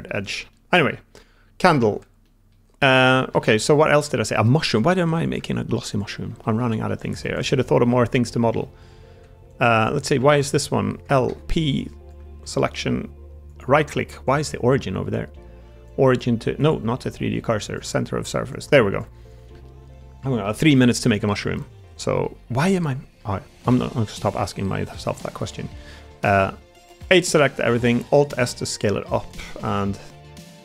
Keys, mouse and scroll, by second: 0.0 Tab, 0.4-1.7 middle drag, 1.8 Tab, 2.1 middle click, 2.9 middle click, 3.3 shift+middle click, 3.6 Tab, 4.2 middle click, 5.3 Tab, 6.3 shift+Tab, 6.3 shift+middle click, 6.6 middle click, 6.9 Tab, 8.1 l, 8.5 middle click, 9.0 Tab, 10.1 Tab, 10.8 l, 11.2 p, 12.2 Tab, 14.2-18.9 drag, 19.1 Tab, 19.5 middle click, 20.3 middle click, 20.7 shift+middle click, 21.0 middle click, 21.4 middle click, 22.1 middle click, 23.6 ctrl+r, 23.6 3, 25.3 middle click, 28.0 alt+s, 28.0 a, 28.9 3, 29.7 middle click.